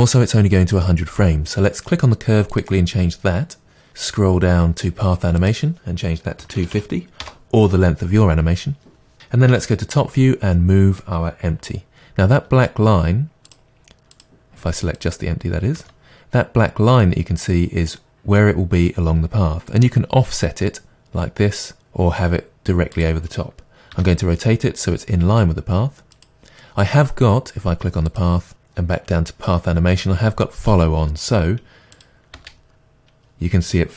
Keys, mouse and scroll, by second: 4.3-4.6 scroll down 1, 5.4-14.3 drag, 7.3 Return, 9.5 KP_7, 12.4 g, 15.0 click, 15.8 g, 23.1 click, 23.9 r, 26.3 click, 28.1 click, 28.7-29.5 scroll down 1, 32.0-33.9 drag, 32.4 space.